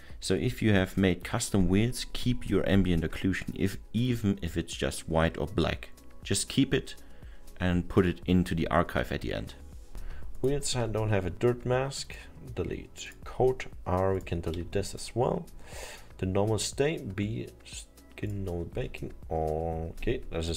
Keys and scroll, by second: 10.5 Delete, 14.6 Delete, 18.8 Delete.